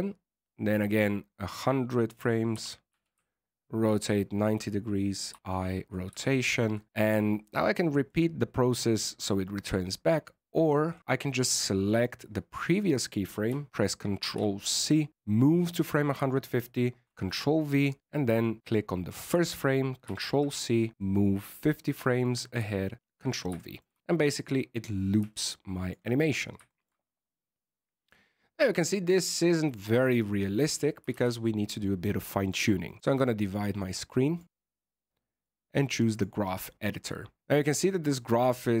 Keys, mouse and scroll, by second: 0.0 click, 0.0 i, 2.5 r, 5.3 i, 6.2 shift+scroll up 1, 6.2 shift+middle click, 8.0 click, 11.2 right click, 11.8 right click, 14.2 ctrl+c, 15.1 click, 17.0 ctrl+v, 18.3 right click, 20.0 ctrl+c, 22.5 click, 23.0 ctrl+v, 23.5 shift+middle click, 23.9 alt+a, 25.1 click, 26.4 scroll down 3, 26.6 shift+middle click, 28.2-29.4 scroll up 1, 31.1 alt+a, 32.4 click, 32.8 click, 33.5 click, 34.4 click, 35.3 click, 37.4-38.8 scroll down 19.